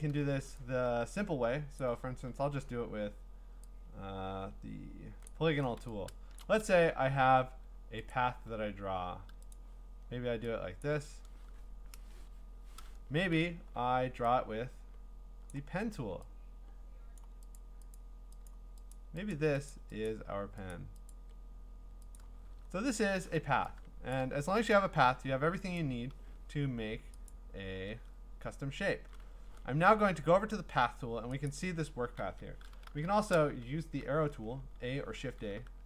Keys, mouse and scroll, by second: 1.8 click, 5.2-6.4 click, 6.3 click, 6.4 click, 8.1 click, 9.5 click, 12.0 Return, 15.5 click, 17.2 click, 17.6 click, 18.0 click, 18.5 click, 18.9 click, 19.3 click, 19.7 click, 20.1 click, 20.7 click, 21.1 click, 22.2 click, 22.7-23.3 scroll, 24.2 click, 25.8 click, 27.3 click, 31.5 click, 32.2 a, 32.8 shift+a, 35.6 a.